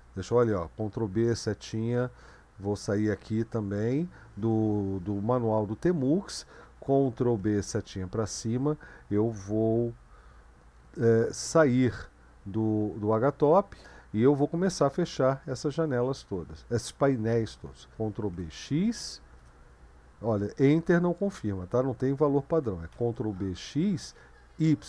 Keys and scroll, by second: 0.3 ctrl+b, 1.1-24.8 Right, 3.4 q, 7.2 ctrl+b, 7.7 Up, 11.8 q, 13.4 Return, 17.9 ctrl+b, 18.3 x, 19.4 Return, 22.9 ctrl+b, 23.3 typing, 24.6 typing.